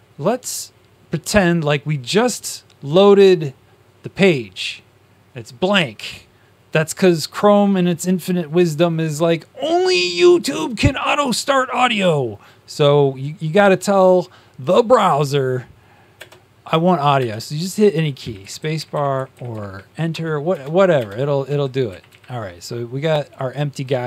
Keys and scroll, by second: 16.1 Up, 18.5 Up, 19.1 Up, 20.1 Up, 20.1 Return, 20.9 Return, 21.4 Down.